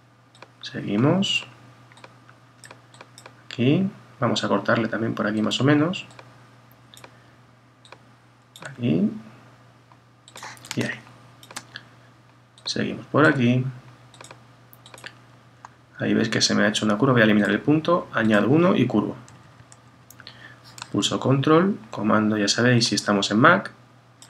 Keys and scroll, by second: 19.3 Right.